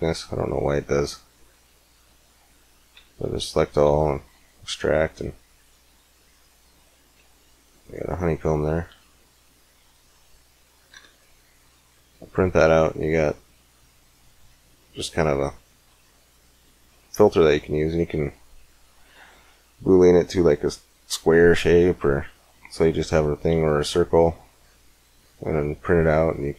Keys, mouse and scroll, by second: 1.3 Tab, 1.8 Tab, 2.8 a, 3.1 a, 3.7 e, 5.9 click, 6.5 z, 7.1 z, 7.8 middle click, 8.9 g, 10.8 Tab, 11.2 middle click, 13.5 middle click, 25.0-26.5 middle drag.